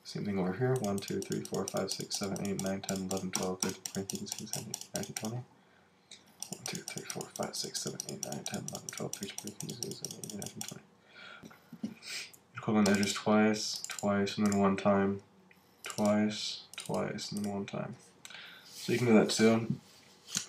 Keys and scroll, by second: 11.4 alt+super+z.